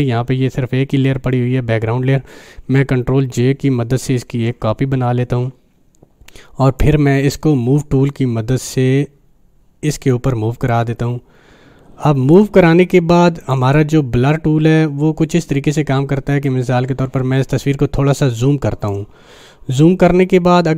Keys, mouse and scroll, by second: 3.2 click, 4.3 ctrl+j, 6.8-13.4 drag, 7.7 click, 8.2 click, 16.5-18.9 drag, 19.4 scroll down 1, 20.1 scroll down 1.